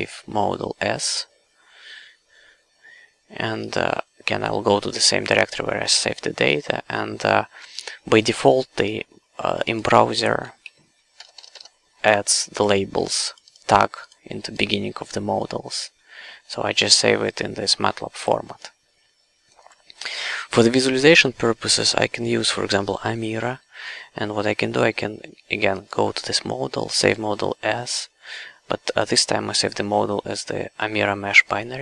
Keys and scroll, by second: 10.7 Right, 11.2 BackSpace.